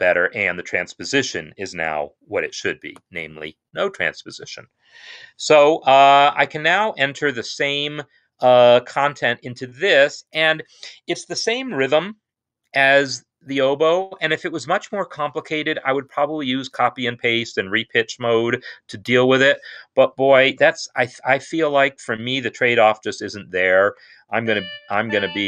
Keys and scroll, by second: 9.0 n, 20.6-21.1 typing, 23.8 4, 24.1 d, 24.9 shift+a.